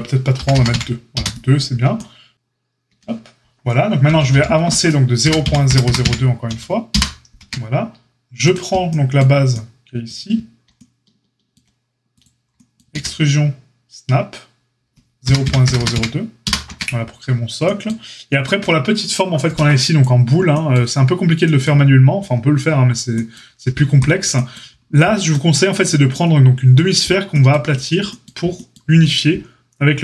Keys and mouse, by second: 2.8 Tab, 4.0 g, 7.3 Tab, 8.5-12.2 drag, 12.2-30.0 middle drag, 12.9 e, 16.6 Tab.